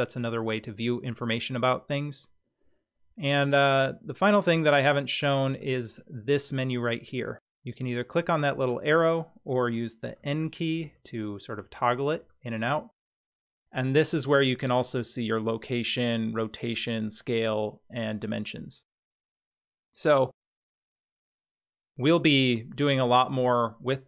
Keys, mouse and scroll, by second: 5.6 click, 10.2 n, 10.9 n, 11.7 n, 12.2 n, 19.6-22.1 middle drag.